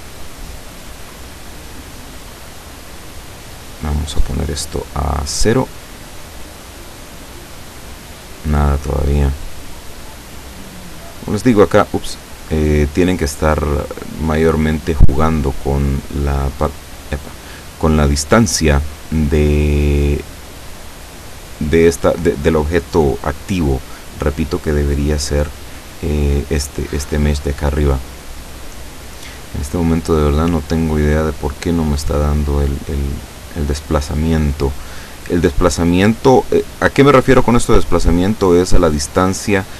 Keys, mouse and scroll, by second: 1.5 click, 3.8-5.5 drag, 5.9 click, 9.2 click, 9.7 click, 10.2 click, 11.0 click, 11.9 click, 12.4 click, 14.4 click, 14.8 click, 16.9 click, 17.7 click, 23.7 scroll down 2, 24.0-24.3 scroll up 2, 25.3-25.7 scroll down 1, 30.9 scroll down 1, 35.8 scroll down 1, 35.8-36.9 middle drag, 36.9 scroll down 1, 37.3 middle click, 38.1 scroll up 1.